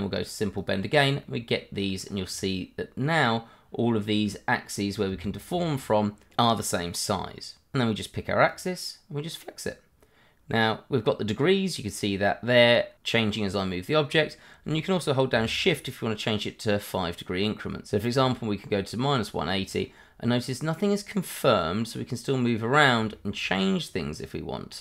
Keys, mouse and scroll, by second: 0.6 click, 1.2 middle click, 2.0 scroll up 1, 2.3 middle click, 4.8 scroll down 1, 5.2 shift+middle click, 6.4 middle click, 8.5 click, 9.6 click, 11.3 click, 15.5 shift+click, 19.5 scroll down 1, 19.8 middle click, 23.2 shift+middle click, 23.8 click, 24.4 click.